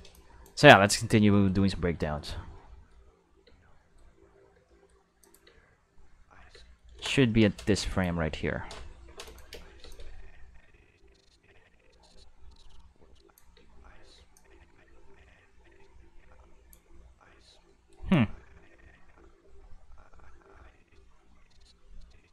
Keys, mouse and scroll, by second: 0.1 drag, 1.3 middle click, 2.5 middle click, 3.4 space, 3.7 middle click, 4.5 space, 4.6 middle click, 5.2 click, 5.4 space, 6.0 middle click, 6.3 middle click, 6.5 space, 6.6 middle click, 7.2 middle click, 7.8 click, 9.2 click, 9.5 space, 9.8 space, 9.8-13.3 drag, 13.5 space, 14.1 space, 14.3-16.6 drag, 16.8 space, 17.4 space, 17.7 middle click, 18.1-22.3 drag.